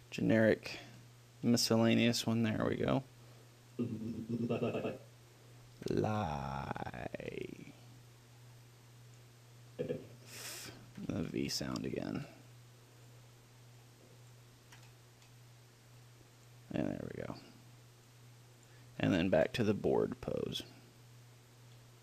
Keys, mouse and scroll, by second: 4.0-5.2 drag, 5.2-7.6 middle drag, 6.0 ctrl+l, 10.0-11.6 drag, 11.2 ctrl+l, 14.1-16.8 drag, 15.0 ctrl+l, 17.3-18.4 middle drag, 18.4-20.2 drag, 19.3 ctrl+l.